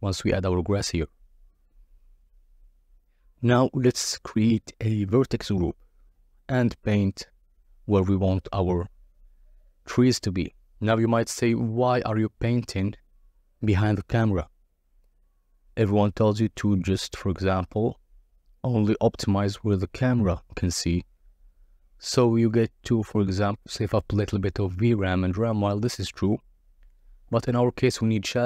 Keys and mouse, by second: 0.8-1.6 drag, 2.4 click, 3.3-4.3 drag, 4.8 KP_7, 5.5 click, 7.9 click, 13.2 KP_0, 14.1 click, 17.3 KP_0, 17.9 click, 18.9 click, 25.1 click, 26.0 n.